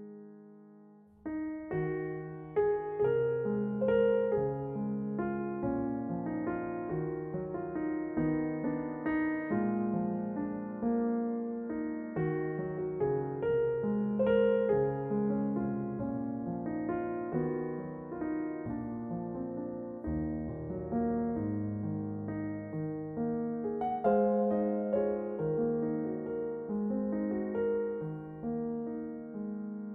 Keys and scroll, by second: 1.3 r, 3.7 g, 6.1 r, 8.6 s.